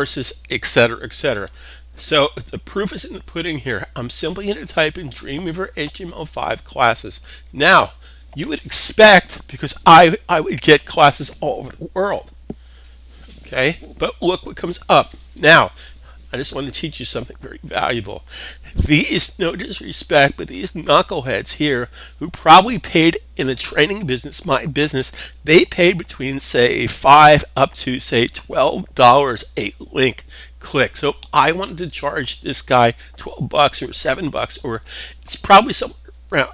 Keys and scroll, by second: 0.0-1.0 typing.